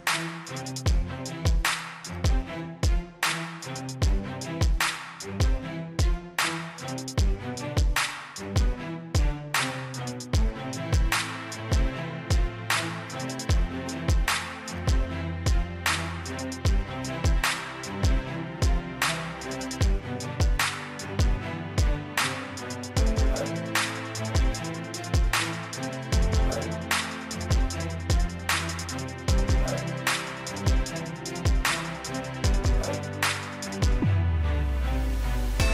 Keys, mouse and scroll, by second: 0.4 right click, 1.1 click, 5.3 scroll down 1, 7.2-15.5 drag, 17.2 scroll up 1, 18.4 click, 19.1 scroll up 1, 21.0 scroll down 1, 25.3 scroll up 1, 26.0-30.0 scroll down 1, 31.8-32.6 scroll up 1, 32.6-33.2 scroll down 1, 35.6 scroll up 1.